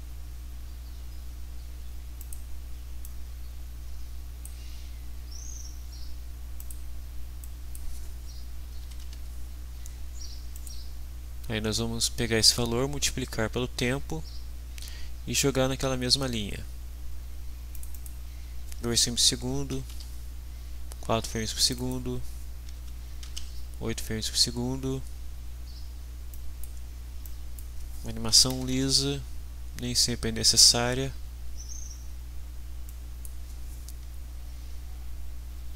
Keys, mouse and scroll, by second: 2.2 click, 3.0-4.6 drag, 6.6 click, 7.4 click, 8.7 2, 9.0 Return, 10.5 click, 17.7 click, 19.7 4, 19.9 Return, 21.6 click, 22.7 8, 26.3 click, 27.2 click, 28.0-29.0 typing, 32.8 click, 35.5-35.7 typing.